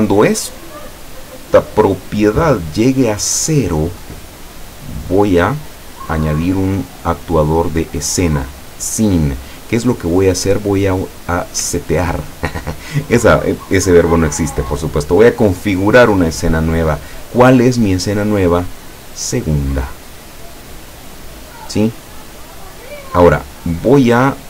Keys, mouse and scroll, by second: 1.4 click, 1.9 click, 3.3-4.2 middle drag, 5.2 click, 8.1 click, 10.2 click, 16.6 click, 18.0 click, 19.2 click, 20.8-22.0 drag, 22.9-23.6 middle drag.